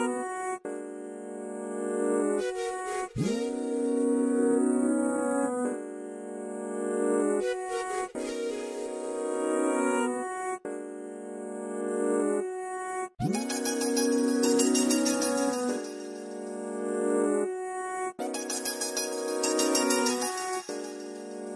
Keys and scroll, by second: 6.3 m, 14.6 r, 17.3 space.